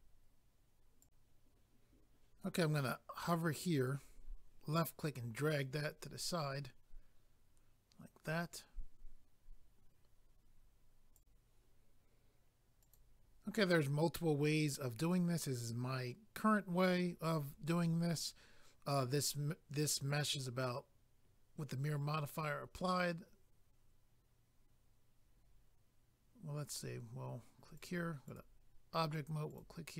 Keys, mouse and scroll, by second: 1.0 click, 1.1 click, 3.9 click, 5.9 scroll down 1, 11.1 click, 11.2 click, 12.8 click, 12.9 click, 18.1 middle click, 27.8 click, 27.8 click, 28.2 click, 28.3 double click, 29.5 double click, 29.6 click.